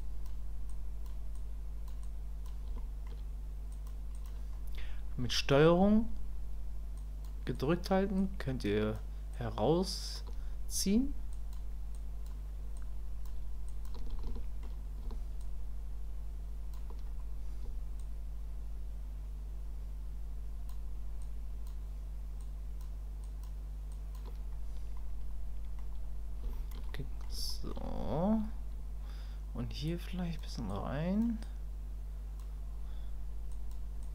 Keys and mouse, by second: 0.0 click, 0.7 click, 1.3 click, 2.0 click, 2.8 shift+middle click, 3.7 click, 4.1 click, 7.0 ctrl+click, 7.5 ctrl+click, 8.2 ctrl+click, 9.3 ctrl+click, 11.3 ctrl+click, 11.9 ctrl+click, 12.7 ctrl+click, 13.7 ctrl+click, 14.3 shift+middle click, 15.4-16.7 ctrl+drag, 18.0-20.7 ctrl+drag, 21.2 ctrl+click, 22.4 ctrl+click, 23.2 ctrl+click, 23.9 ctrl+click, 25.0 middle click, 26.5 shift+click, 26.9 click, 27.5 shift+click, 29.9 click, 30.7 click, 31.4 click, 33.5 click, 34.0 click.